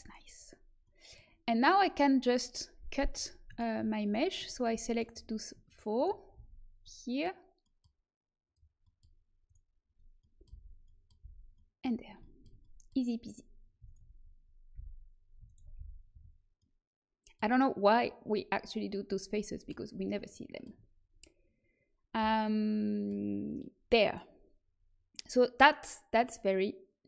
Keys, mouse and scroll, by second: 0.1-2.9 middle drag, 3.1-5.1 drag, 5.6-7.8 drag, 6.3 f, 7.8 middle click, 8.4 click, 8.8-10.1 middle drag, 9.4 click, 9.4 right click, 10.4 f, 11.1 f, 13.8-17.3 middle drag, 15.7 f, 16.0 a, 21.6-24.2 middle drag.